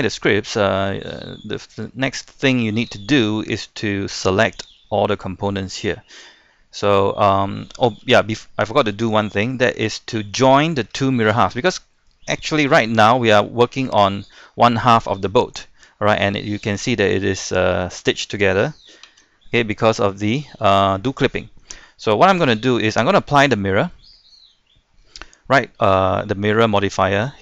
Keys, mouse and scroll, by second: 0.2 middle click, 1.2 shift+middle click, 1.6-1.9 scroll down 1, 2.0 shift+middle click, 3.1 shift+middle click, 6.9-7.2 scroll down 1, 7.2-8.2 scroll up 2, 8.2 middle click, 9.3-9.6 scroll down 1, 9.6 middle click, 10.6-12.9 shift+scroll up 2, 12.9 a, 13.3 a, 14.2-15.9 drag, 19.4 ctrl+z, 20.8-22.0 middle drag, 22.5 Tab, 26.9 middle click, 27.2-27.4 scroll up 1.